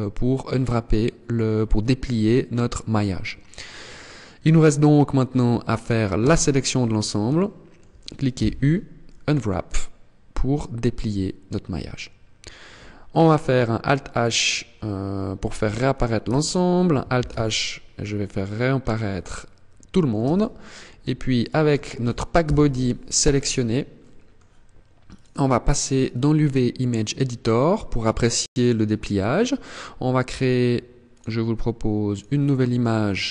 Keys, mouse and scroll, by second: 4.4-5.7 scroll up 1, 5.7-6.1 scroll up 1, 5.7 a, 6.3 scroll down 1, 6.9 shift+middle click, 7.9 u, 11.5-12.1 scroll down 1, 12.1 scroll down 1, 12.2 scroll up 1, 14.9 alt+h, 15.8 Tab, 16.7 alt+h, 17.1-17.5 scroll down 4, 17.7-18.3 scroll up 4, 18.5 middle click, 19.7 Tab, 20.9 right click, 21.9 ctrl+l, 22.9 scroll down 1, 23.5 middle click.